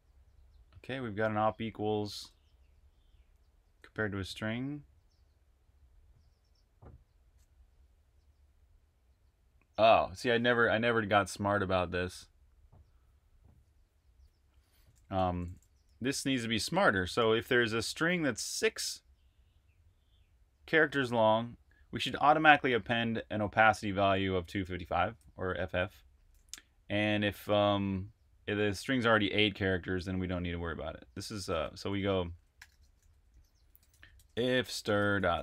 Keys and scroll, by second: 0.0-3.7 typing, 14.5-16.0 typing, 17.0 shift+v, 31.5 Escape, 31.6-35.4 typing.